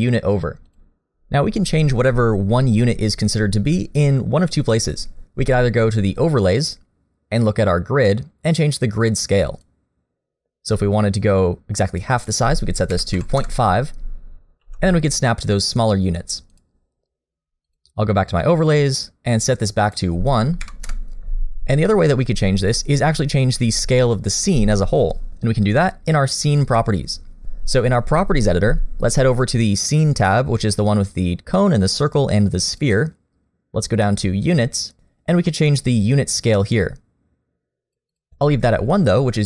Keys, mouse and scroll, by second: 6.6 click, 14.6 g, 17.6 click, 32.7 click, 34.6 click, 36.4 click, 38.1 click.